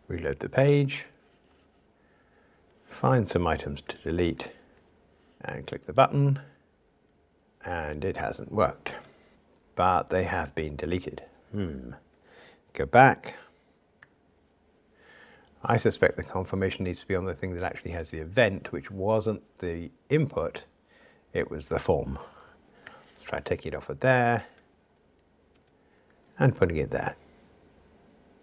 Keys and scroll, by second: 22.9 super+x, 26.0 super+x, 26.2 super+v.